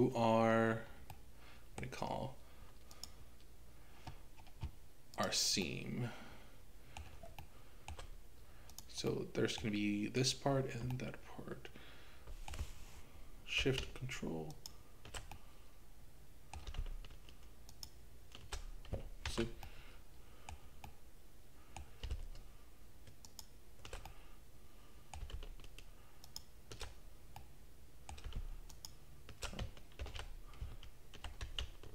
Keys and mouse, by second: 1.1-3.0 middle drag, 3.0 click, 5.2 click, 5.6-7.1 middle drag, 7.4 shift+middle click, 9.2 middle click, 10.9-12.5 middle drag, 14.6 ctrl+shift+click, 15.3-16.7 middle drag, 17.7 ctrl+shift+click, 19.3 ctrl+z, 19.7 middle click, 20.9-22.0 middle drag, 23.3 ctrl+shift+click, 24.1-26.6 middle drag, 27.4 middle click, 28.7 ctrl+shift+click, 30.0 ctrl+z.